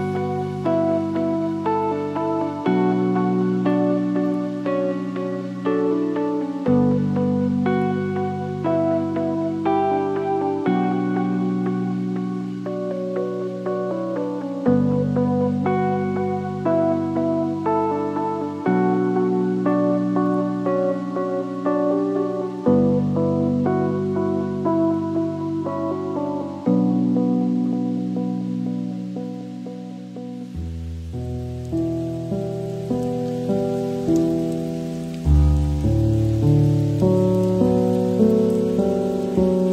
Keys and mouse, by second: 0.5 a, 1.1 click, 4.5 shift+s, 5.5 ctrl+a, 9.1 Tab, 10.0 shift+drag, 10.6 Tab, 11.5 alt+z, 13.2 g, 15.3-16.7 drag, 17.3 g, 18.4 Tab, 19.4 Tab, 20.4 alt+z, 21.6 ctrl+r, 22.7 g, 25.2 g, 26.9 Tab, 28.5 shift+middle drag, 29.8 click, 30.3 shift+d, 32.1 r, 34.0 g, 37.0 shift+middle click, 37.2 shift+drag, 37.7 Tab, 38.2 alt+z.